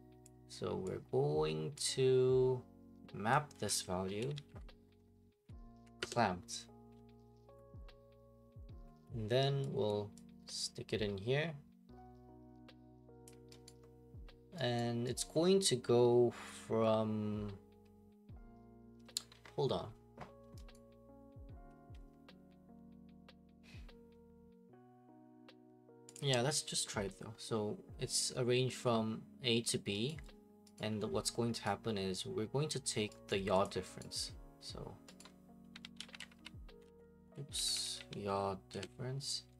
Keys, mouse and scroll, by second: 0.3 click, 1.7 click, 3.7 click, 4.0-5.0 typing, 4.3-5.7 drag, 5.4 Down, 6.0 Up, 6.0 Return, 9.9-11.9 drag, 13.2 click, 13.7 right click, 14.8 right click, 15.2 right click, 20.7 right click, 26.1 click, 30.1 right click, 30.8 right click, 31.6 right click, 33.3 right click, 33.6 click, 34.0 right click, 35.4-38.7 typing.